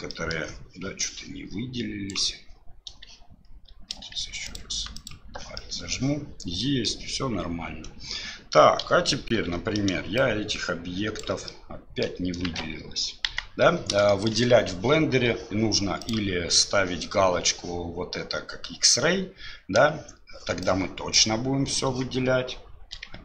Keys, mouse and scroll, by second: 0.1 middle click, 1.1 click, 4.4 alt+click, 5.0 alt+click, 5.6 middle click, 6.6 middle click, 7.7 KP_1, 8.8 KP_7, 10.2 click, 11.6 middle click, 12.4 ctrl+z, 13.2 KP_1, 14.0 shift+middle click, 16.0 click, 20.7 click.